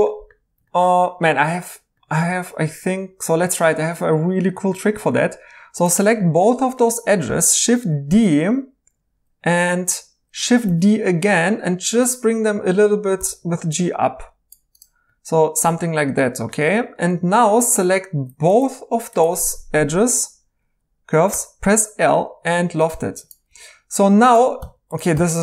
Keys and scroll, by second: 8.1 d, 10.6 d, 13.2 g, 21.3 1, 23.5 2, 24.6-25.1 typing.